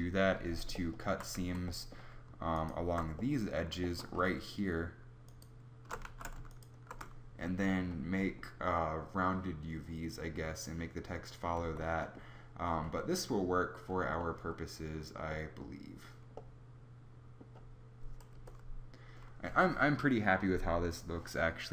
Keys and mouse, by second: 0.7 middle click, 1.1 z, 1.5 Tab, 6.1 ctrl+z, 11.8 Tab, 18.3 KP_0.